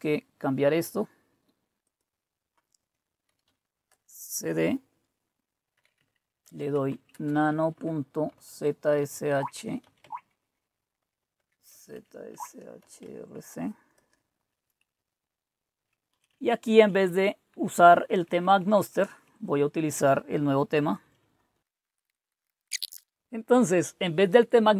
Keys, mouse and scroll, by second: 0.0-1.7 drag, 1.8 click, 3.0-4.0 typing, 5.5-13.5 typing, 13.9 Tab, 14.7-19.5 typing, 20.8-22.6 typing, 22.6 Delete, 22.9 alt+Tab, 23.0 Left.